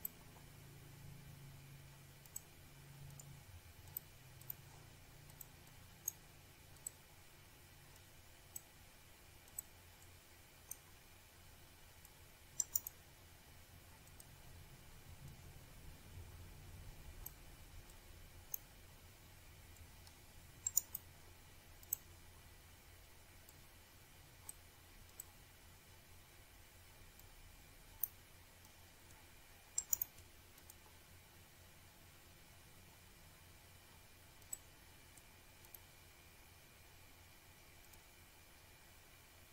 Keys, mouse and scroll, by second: 1.1 click, 5.9 click, 6.9 click, 8.4 click, 10.0-10.8 scroll up 1, 11.5 click, 13.1 click, 14.5 ctrl+click, 15.9 click, 16.8 click, 18.7 scroll up 1, 19.0 click, 20.6 click, 21.1 click, 23.3 click, 25.9 click, 26.4 click, 27.5-28.4 scroll down 1, 28.4 click, 30.3 click, 33.9 click, 35.7 click, 37.7 click, 39.3 click.